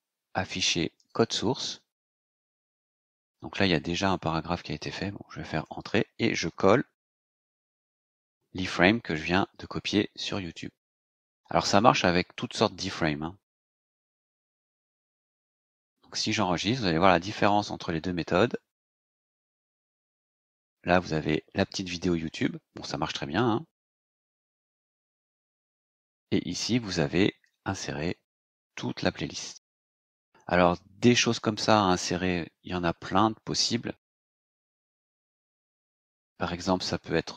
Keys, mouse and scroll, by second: 1.0 click, 3.0 click, 4.5 click, 5.6 Return, 7.3 ctrl+v, 13.8 click, 15.1-15.4 scroll down 2, 16.4-16.7 scroll down 2, 17.0-17.7 scroll down 4, 18.4 click, 19.9-20.5 scroll down 4, 22.3 click, 25.5 click, 26.3-26.9 scroll down 4, 27.6 click, 29.9 click.